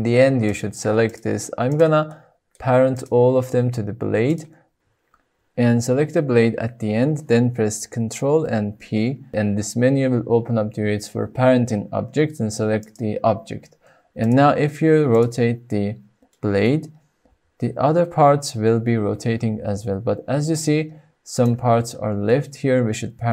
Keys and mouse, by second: 2.3-2.7 shift+drag, 4.4-4.7 shift+drag, 8.6 ctrl+p, 14.1 drag, 16.2 middle click, 17.2 r, 21.2 right click, 22.2-22.8 shift+middle drag.